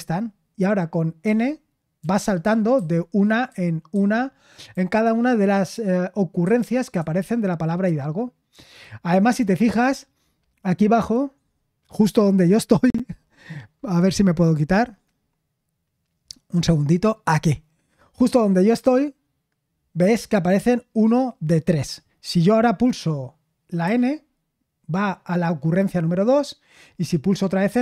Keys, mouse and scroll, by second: 1.2-2.8 typing, 3.9-4.7 typing, 6.4-7.8 typing, 16.5-23.8 drag, 23.8 typing, 27.7 typing.